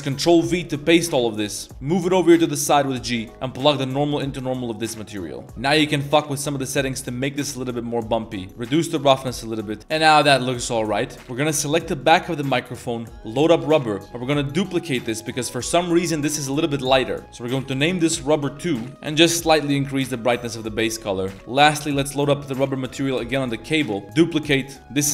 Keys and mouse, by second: 0.2 ctrl+v, 0.8 g, 3.6-4.3 drag, 5.1 middle drag, 5.4 a, 5.9-6.9 drag, 7.1 middle click, 8.0-9.0 drag, 9.9-10.7 middle drag, 11.1 middle drag, 11.2 a, 12.1-13.6 drag, 14.9-18.9 drag, 20.4 a, 20.5 a, 20.6-21.0 middle drag, 21.8 click, 22.6-24.0 drag, 24.1 click, 24.6 middle click, 24.8-25.1 shift+drag.